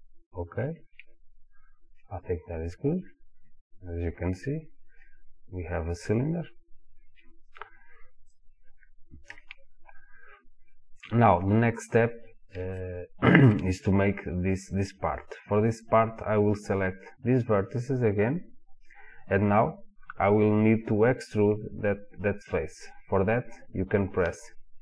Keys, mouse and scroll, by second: 0.5 click, 2.0-4.2 middle drag, 4.2 click, 5.0-8.3 middle drag, 8.3 click, 9.3 KP_1, 12.8-15.8 shift+middle drag, 15.8 click.